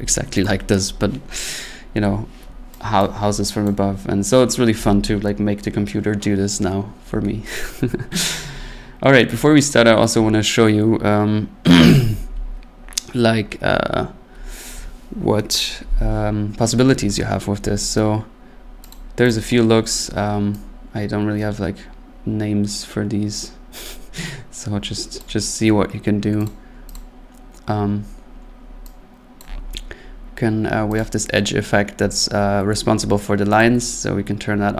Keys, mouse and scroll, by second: 12.2-13.5 drag, 18.9 click, 19.3 click, 25.2 click, 26.5 click, 27.0 click, 29.4 click, 31.0 click, 33.6 click.